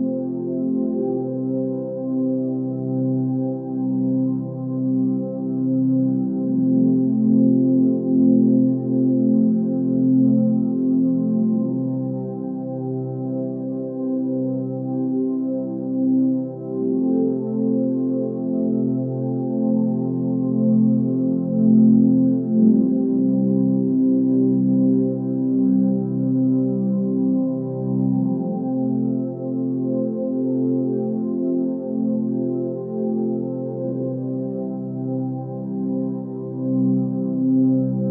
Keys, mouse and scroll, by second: 22.2 ctrl+z, 23.5 ctrl+shift+z, 29.7 ctrl+space.